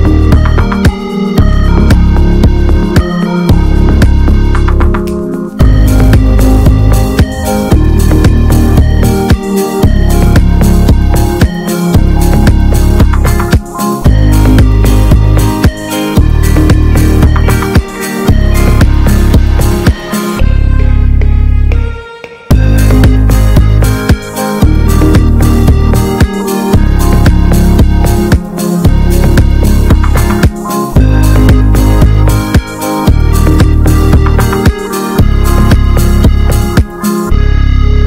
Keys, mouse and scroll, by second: 0.3-2.2 drag, 2.2 ctrl+z, 3.9 right click, 4.7-6.2 drag, 6.2 f, 7.1-9.4 drag, 9.4 scroll down 1, 9.6-10.8 middle drag, 10.8 scroll up 1, 11.0 shift+middle click, 11.8-13.0 drag, 13.0-14.3 shift+middle drag, 14.3-16.5 drag, 16.5 scroll down 2, 16.7-18.3 middle drag, 18.3-18.6 scroll up 4, 18.7 shift+middle click, 19.0-19.8 scroll up 3, 19.8-22.3 drag, 22.6 scroll down 1, 22.8 shift+middle click, 23.3-25.9 drag, 26.4 scroll down 2, 26.6-27.7 middle drag, 27.7-30.2 drag, 30.4-31.4 middle drag, 31.4-33.9 drag, 33.9 shift+middle click, 34.7-38.0 drag.